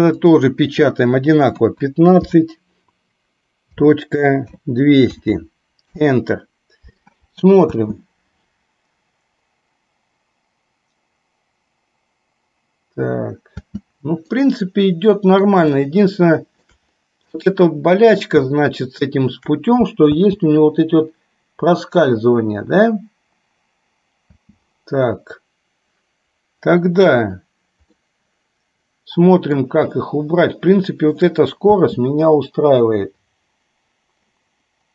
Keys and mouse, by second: 0.2-6.1 drag, 5.4 KP_0, 7.9 space, 13.8 space, 14.5-15.6 middle drag, 16.0-16.9 shift+middle drag, 17.5-18.4 middle drag, 18.6-19.5 shift+middle drag, 20.3 space, 24.5 space, 28.0-29.7 middle drag, 30.1-31.4 shift+middle drag, 31.9 space.